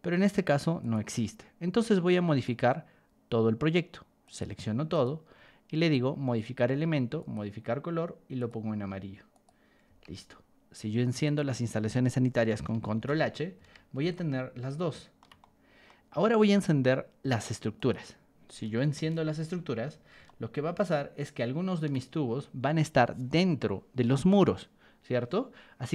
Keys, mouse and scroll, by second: 0.8 click, 2.4 click, 4.2 click, 4.9 right click, 7.2 click, 8.3 click, 9.3 click, 9.8 Escape, 11.2 click, 12.9 ctrl+h, 13.5 Escape, 14.1-15.1 shift+middle drag, 15.4 middle click, 17.7 click, 19.0 ctrl+h, 19.7 Escape, 20.2-21.8 shift+middle drag.